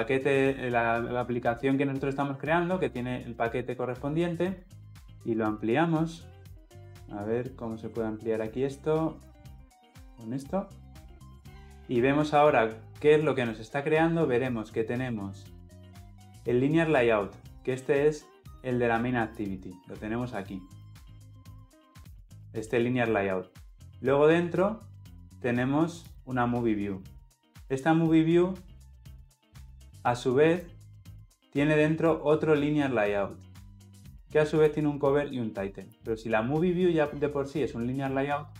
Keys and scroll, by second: 19.3 ctrl+b.